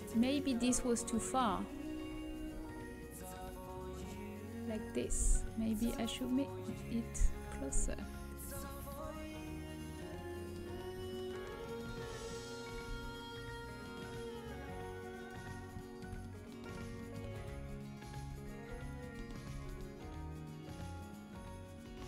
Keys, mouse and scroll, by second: 2.3 g, 5.5 g, 12.6 g, 15.4 middle click, 17.5-19.4 typing.